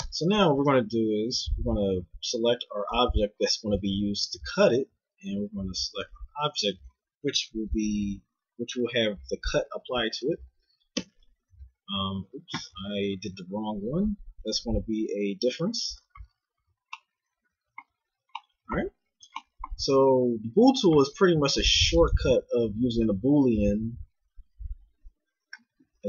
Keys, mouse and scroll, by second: 0.0 Tab, 3.3 g, 6.5 click, 6.9 right click, 7.7-10.2 middle drag, 10.9 ctrl+KP_Multiply, 14.5-16.2 drag, 16.2-21.9 middle drag, 20.5 t, 21.9-26.0 drag.